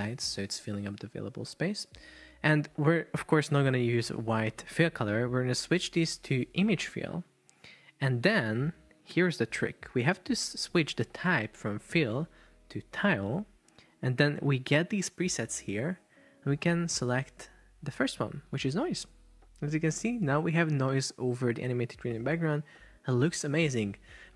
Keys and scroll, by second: 0.9 Return.